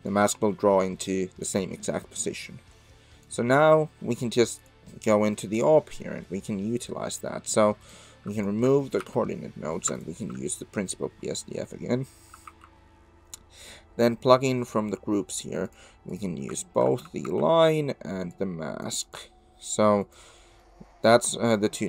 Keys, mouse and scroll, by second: 0.2-3.3 shift+drag, 4.6 click, 5.1-5.6 middle drag, 6.2 middle click, 7.1 middle click, 8.3 shift+click, 9.0 x, 10.0 ctrl+shift+click, 12.5 shift+a, 17.2 shift+a, 20.5 click, 21.2 click.